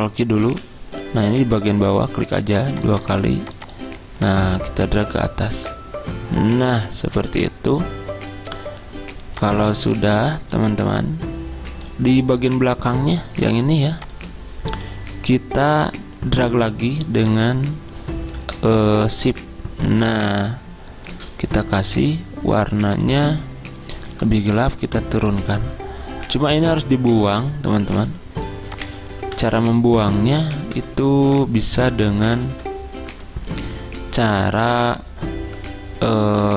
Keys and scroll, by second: 0.6 ctrl+q, 24.8 ctrl+Page_Down, 29.6 ctrl+z, 32.6 ctrl+z.